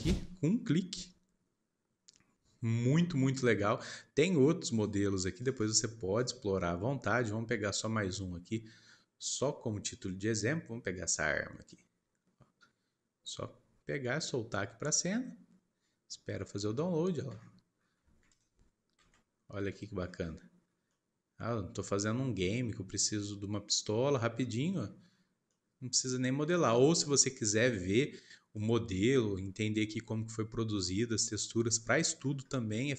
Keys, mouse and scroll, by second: 3.4-6.5 scroll down 3, 16.2-16.7 scroll up 4, 16.7 shift+middle click, 17.3-17.9 scroll up 10, 18.2 click, 18.9 KP_Decimal, 19.5 scroll down 1, 19.7 middle click, 20.0-20.6 scroll up 2, 20.6 scroll down 1, 20.8-23.8 middle drag, 24.3-25.0 scroll up 5, 25.0-25.5 scroll down 4, 25.5-32.9 middle drag.